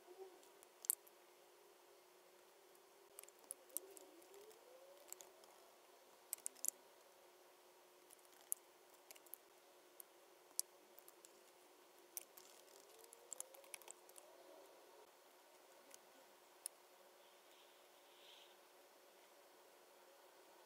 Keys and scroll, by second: 3.7 super+F9, 4.3 BackSpace, 4.9 b, 5.3 l, 5.4 Left, 10.9 super+F9, 15.9 space.